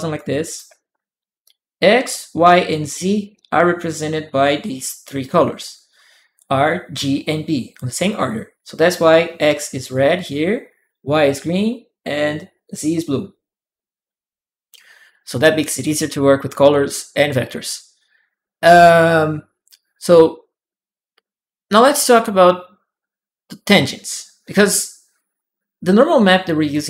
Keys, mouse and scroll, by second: 26.5 click.